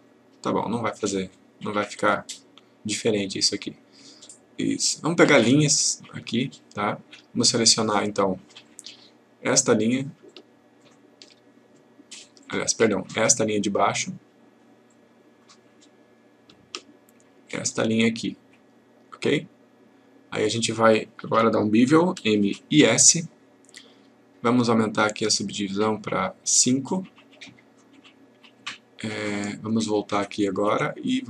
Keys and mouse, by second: 4.2-5.4 click, 8.6 click, 12.4 click, 17.5 shift+click, 19.3-20.5 click, 22.2 m, 25.5 click, 30.3 click.